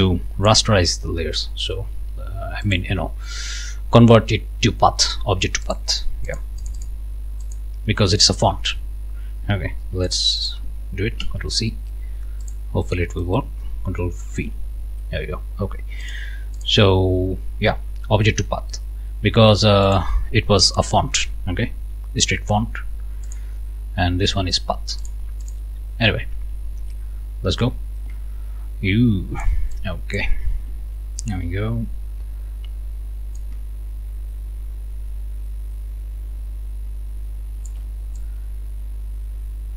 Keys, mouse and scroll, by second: 0.0 click, 2.6 click, 5.6 click, 6.3 click, 7.4 click, 10.1 ctrl+click, 10.5 ctrl+click, 11.2 ctrl+c, 12.4 click, 13.0 click, 14.3 ctrl+v, 16.0 click, 16.6 click, 19.8 click, 20.7-21.1 ctrl+scroll up 2, 23.3-25.3 drag, 25.4 click, 26.4 ctrl+scroll down 2, 27.6-29.6 drag, 29.7 ctrl+shift+click, 30.8-31.9 ctrl+scroll down 6, 32.2 scroll up 2, 33.4-37.9 ctrl+shift+drag, 38.2-39.7 ctrl+shift+drag.